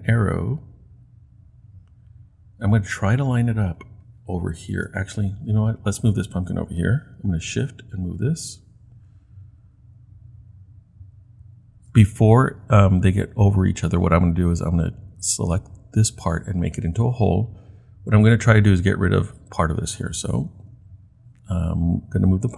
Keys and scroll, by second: 0.3 shift+Left, 0.4 shift+Left, 7.5 shift+Right, 8.0 shift+Right, 11.9 shift+Right.